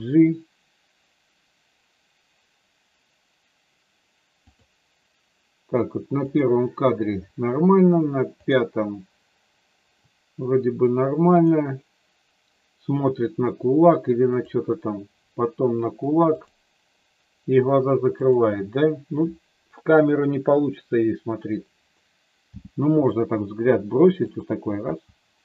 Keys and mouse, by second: 6.3 click, 8.4 click, 11.3 click, 16.3 click, 18.2 click, 22.4 g, 24.3 click, 24.8 g.